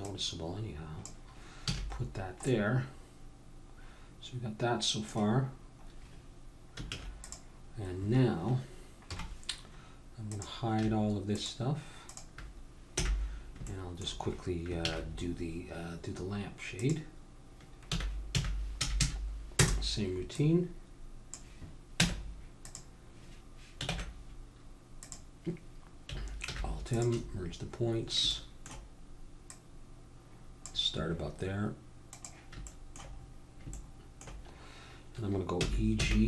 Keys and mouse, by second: 1.8 a, 2.1-3.1 middle drag, 4.2 middle click, 5.3-7.7 middle drag, 6.9 ctrl+s, 7.7-9.2 drag, 9.1 KP_1, 10.3 click, 12.9 h, 13.7 click, 14.0-16.1 middle drag, 14.8 shift+a, 17.9 r, 20.3-22.7 drag, 22.0 Tab, 23.9 ctrl+Tab, 26.4 alt+m, 28.7-31.4 drag, 32.1-34.1 drag, 35.6 e.